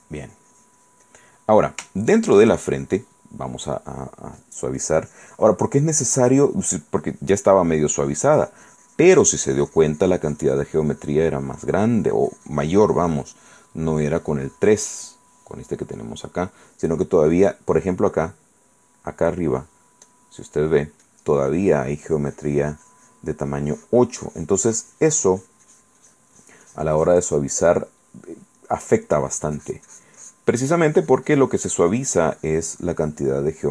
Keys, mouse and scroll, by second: 1.5 click, 2.1 shift+click, 2.6 shift+click, 3.9 click, 4.6 click, 5.0 click, 5.9 middle click, 6.4-13.9 drag, 14.0 middle click, 14.4-15.5 drag, 17.3 click, 17.3 right click, 18.9 click, 18.9 right click, 20.2 click, 21.2 click, 21.8-23.5 drag, 23.6-28.1 drag, 28.1 middle click, 28.8 click, 28.8 right click, 29.3-33.7 drag, 33.5 right click.